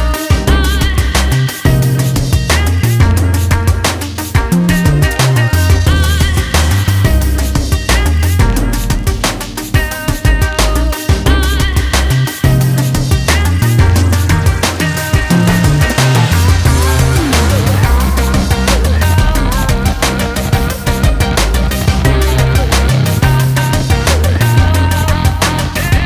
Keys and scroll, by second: 13.1 ctrl+z.